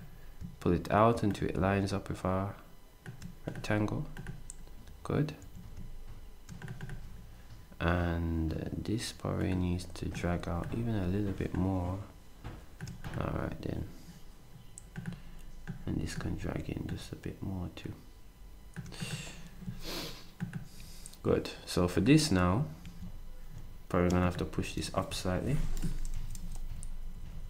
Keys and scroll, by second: 5.4 s, 22.8 s, 26.1 Up, 26.4 Up, 26.7 Up, 26.7 Up, 27.2 Up, 27.3 Up.